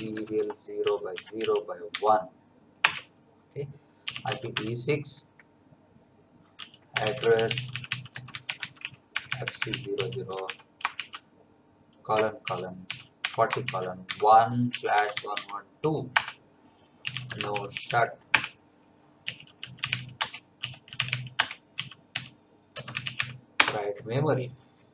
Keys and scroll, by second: 0.0-1.9 typing, 2.8 Return, 3.8-4.7 typing, 6.3-10.9 typing, 12.2-17.8 typing, 16.1 Return, 18.3 Return, 19.0-23.7 typing.